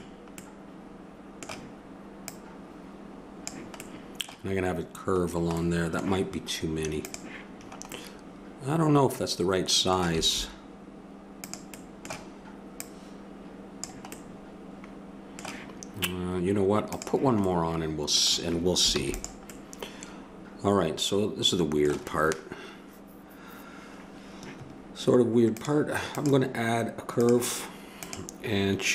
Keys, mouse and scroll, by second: 0.8-2.1 middle drag, 2.3-3.9 drag, 3.9 middle click, 7.1-9.0 drag, 10.2 s, 12.7-14.8 drag, 14.8-16.9 middle drag, 16.9 click, 17.4-18.7 middle drag, 18.9 ctrl+s, 25.5-28.9 drag.